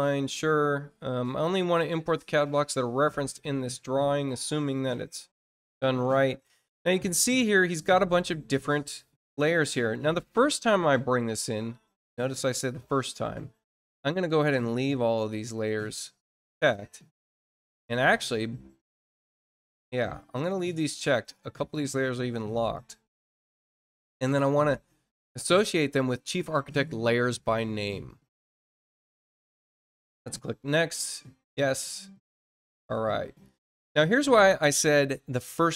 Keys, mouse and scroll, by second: 3.1 click, 7.5-21.7 drag, 22.7 click, 24.3 click, 29.4 click, 30.8 click, 31.6 click.